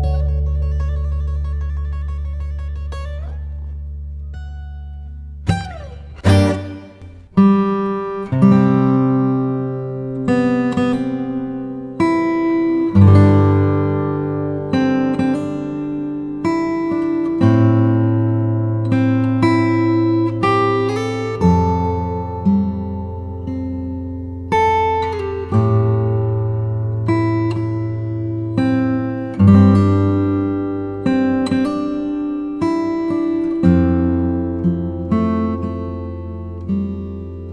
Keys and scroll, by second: 20.6 Return.